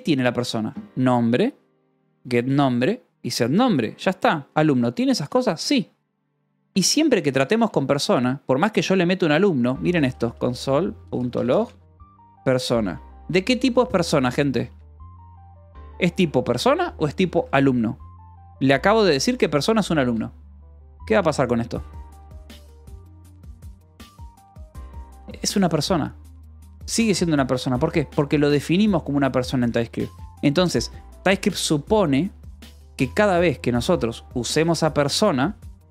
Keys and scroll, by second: 4.6-7.8 typing, 9.2-16.7 typing, 13.2 Escape, 14.6 Escape, 16.0 Escape, 16.9 Escape, 17.7 ctrl+s, 17.9-22.3 typing, 18.7 Escape, 19.9 Escape, 21.9 Escape, 24.7 shift+k, 27.5 Escape, 34.2 k, 34.6 j.